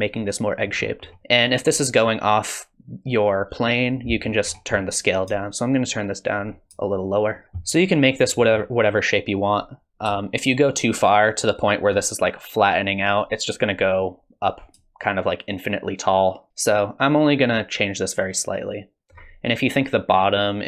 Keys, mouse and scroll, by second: 0.7-3.4 scroll down 8, 1.2 middle click, 4.1 middle click, 4.5-5.3 scroll up 6, 5.3 scroll up 2, 5.4 shift+click, 7.0 shift+click, 7.4 middle click, 7.4-8.4 scroll up 1, 8.4 middle click, 9.5 click, 10.3 shift+click, 15.0 shift+click.